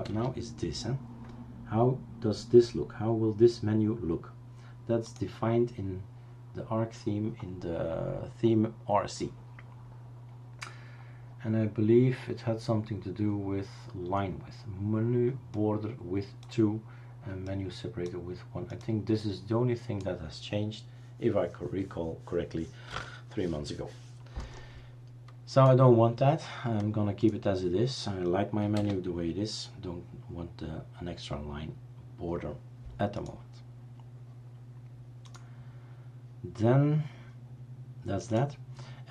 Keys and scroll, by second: 0.1 super+space, 29.0 super+space.